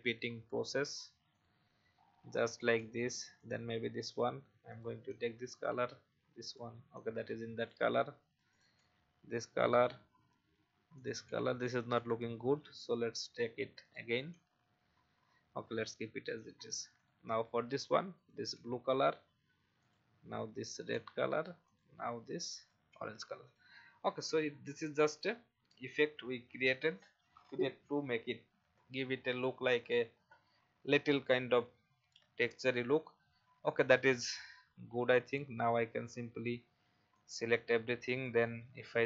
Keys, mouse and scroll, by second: 1.3 click, 1.9-2.8 scroll up 1, 2.8 v, 3.4 click, 3.8 i, 5.0 v, 5.8 i, 7.0 v, 7.6 click, 8.0 i, 8.8 v, 10.5 i, 11.2 v, 12.3 i, 14.3 v, 16.9 click, 17.6-18.5 typing, 20.1-22.8 typing, 21.6 click, 23.4 click, 24.2 alt+scroll down 1, 35.2 click, 37.1-38.6 drag.